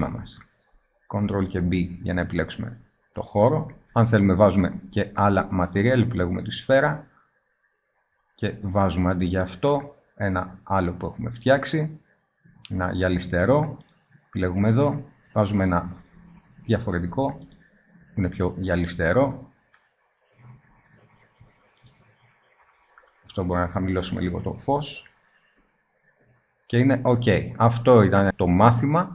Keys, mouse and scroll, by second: 5.3 middle click, 5.8-7.4 drag, 7.6-8.4 middle drag, 8.4-11.3 drag, 11.3 middle click, 13.8-15.4 drag, 20.7-24.8 drag, 25.1 middle click.